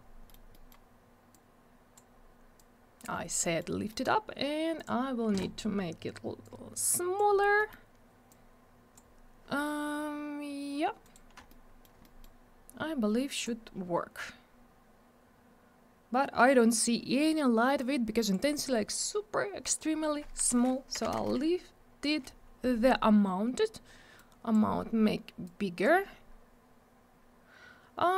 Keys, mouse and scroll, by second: 0.3 middle click, 0.5 middle click, 0.6 double middle click, 1.3 click, 2.5 click, 3.1 scroll up 1, 3.4 middle click, 3.9 middle click, 4.0 double middle click, 4.7 click, 6.4 click, 7.5 middle click, 8.3 click, 11.0 right click, 11.4 alt+middle click, 12.0 middle click, 13.3 click, 17.8 click, 19.6 click, 20.9 5, 21.1 Return, 24.1 click, 25.4 click.